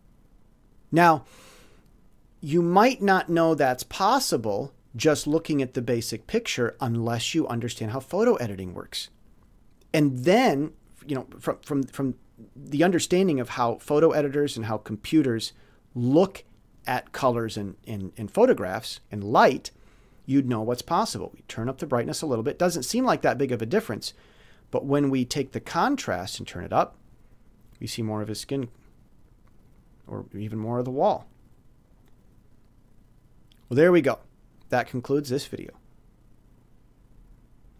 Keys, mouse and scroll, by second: 4.1 scroll up 2, 13.6 click, 16.5 click, 21.5 click, 25.5-26.8 drag, 28.5 click, 34.3 click.